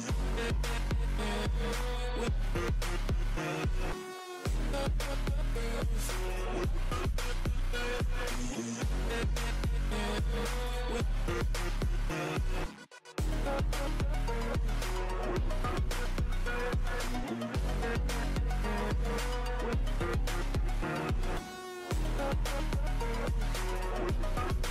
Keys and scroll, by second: 0.1-2.0 typing, 5.2-6.4 typing, 5.6 ctrl+z, 7.8 ], 8.0 ctrl+z, 8.9 ctrl+z, 11.5 ctrl+z, 11.7-12.1 [, 12.1 ctrl+z, 12.9 [, 13.0 [, 15.3 ctrl+z, 15.5 [, 15.5 [, 16.7 ctrl+z, 18.2 ctrl+z, 20.0 ctrl+z, 22.0 ], 22.3 ], 22.4 ], 22.5 [.